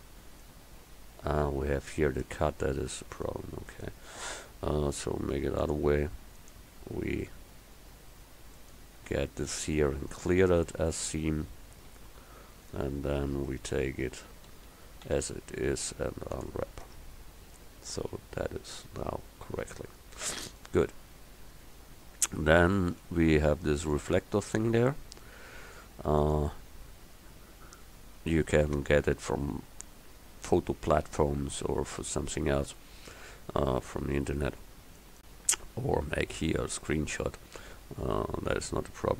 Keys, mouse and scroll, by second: 2.3 Tab, 3.8-5.5 middle drag, 7.8 middle click, 11.0 click, 12.0 a, 13.6 Tab, 14.1 Tab, 14.6 a, 15.1 a, 15.9 u, 16.9 Tab, 17.6-18.9 middle drag, 26.4-28.4 drag, 35.0-39.1 drag.